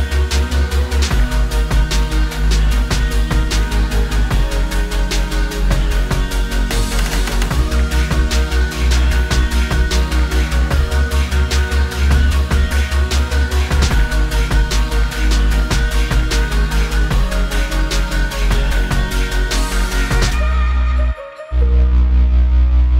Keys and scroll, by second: 7.6 typing, 9.3-9.9 typing.